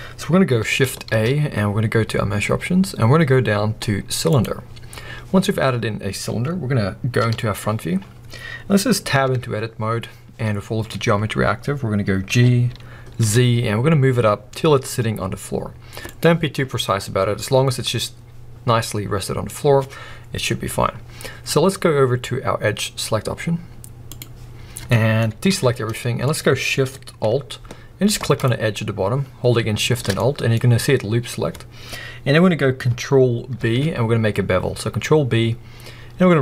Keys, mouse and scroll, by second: 1.0 shift+a, 4.3-4.8 drag, 4.8-7.2 scroll up 2, 7.2 KP_1, 7.9-8.4 scroll up 2, 8.4-9.3 scroll down 2, 9.3 Tab, 9.9-12.3 scroll up 2, 12.3 g, 16.2 click, 16.6-17.1 scroll down 2, 17.1-19.5 middle drag, 19.5-21.2 scroll up 2, 24.0 click, 25.5 alt+a, 25.7-26.3 scroll up 1, 26.3-28.3 middle drag, 28.3 alt+shift+click, 30.1 scroll up 1, 30.2-33.6 middle drag, 33.6 ctrl+b.